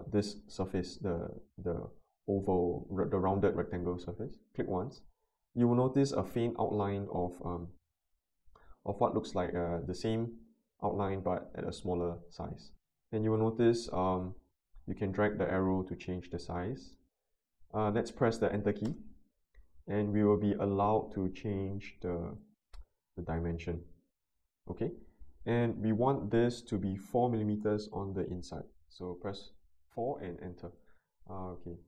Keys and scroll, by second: 18.8 Return, 27.0 4, 27.5 Return.